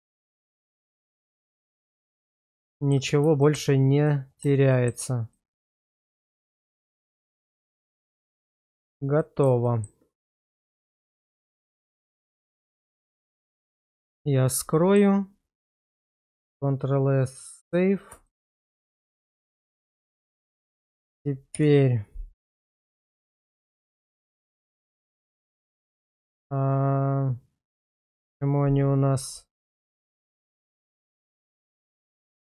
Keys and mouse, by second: 0.1-0.7 middle drag, 1.3 /, 2.5-2.9 middle drag, 3.4 shift+middle drag, 4.0-4.4 middle drag, 4.7 shift+middle drag, 5.3-6.5 middle drag, 7.0 shift+middle drag, 8.7 shift+middle drag, 9.2 middle click, 9.6 shift+middle drag, 13.8 click, 14.8 shift+middle click, 16.2 ctrl+s, 18.2 shift+middle drag, 18.9 click, 20.3-20.6 middle drag, 21.5 /, 22.8 shift+middle drag, 23.5 middle click, 24.8 shift+middle drag, 29.5 middle click, 30.5 shift+middle click, 30.9 middle click, 31.7 shift+middle click, 32.0 middle click.